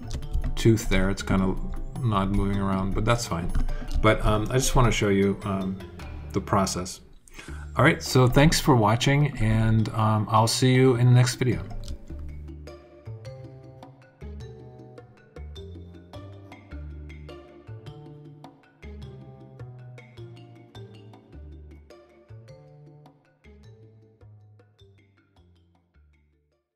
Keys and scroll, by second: 13.9 h, 17.9-19.2 typing, 20.3 e.